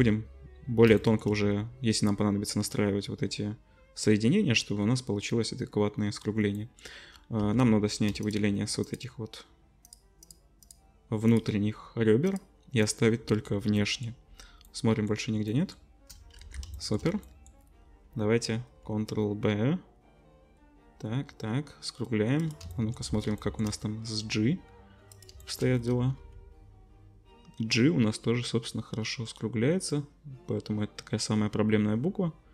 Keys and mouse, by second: 1.0 shift+click, 1.2 middle click, 1.5-4.9 drag, 4.9-6.6 middle drag, 7.4 2, 8.8 shift+click, 9.8 shift+click, 10.6 shift+click, 12.2 shift+click, 12.8 shift+click, 12.9 shift+middle click, 13.8 shift+click, 13.9-14.9 shift+middle drag, 14.9 shift+click, 15.5-16.8 shift+middle drag, 16.4 ctrl+s, 16.8 shift+middle click, 17.2 click, 17.6-18.7 middle drag, 18.7 ctrl+b, 19.0-23.0 drag, 23.0 middle click, 23.3-23.6 shift+drag, 24.5 ctrl+b, 26.2 ctrl+b.